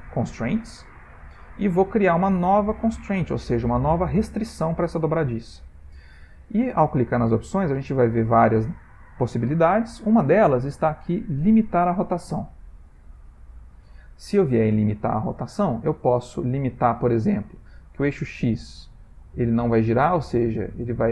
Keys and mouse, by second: 5.4 click, 18.2 click.